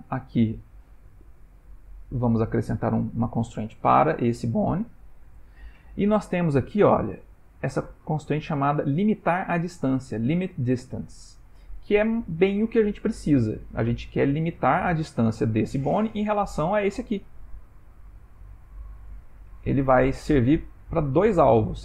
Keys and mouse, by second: 1.8 click, 5.3 click, 20.1 click.